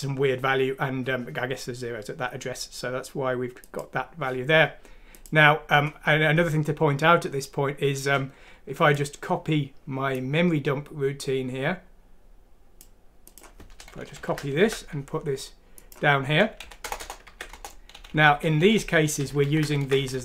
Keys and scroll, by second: 14.2 End, 14.6 ctrl+c, 16.8 shift+Return, 17.3 ctrl+v, 17.5 Return, 18.1 Up, 18.3 Up, 18.4 Up, 18.6 Up, 18.8 Up, 19.2 Down, 19.4 End, 19.8 ctrl+c, 20.0 Down, 20.1 Down.